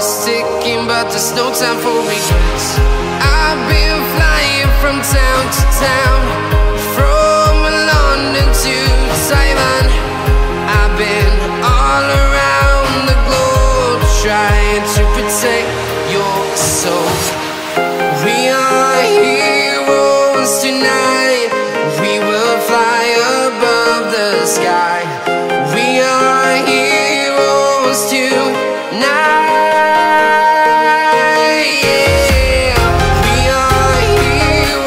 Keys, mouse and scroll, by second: 3.9 click, 5.8 click, 6.4-8.4 right drag, 8.4 click, 8.6 scroll up 1, 9.1-10.7 drag, 10.8 scroll down 1, 11.0 right click, 11.5-12.2 scroll up 1, 12.2-13.7 right drag, 13.7-14.1 scroll down 1, 14.3-16.7 right drag, 16.7 click, 17.1-17.5 scroll down 1, 17.5 right click, 18.0-18.4 scroll down 1, 18.4-18.9 scroll up 1, 19.1 click, 19.5 scroll up 1, 22.1 typing, 22.4 Return, 24.3 click, 26.2-26.7 scroll down 1, 27.7-28.2 scroll up 1, 28.3 shift+click, 28.6-28.9 scroll down 1, 30.1 scroll up 1, 30.8-31.3 scroll, 33.1 click.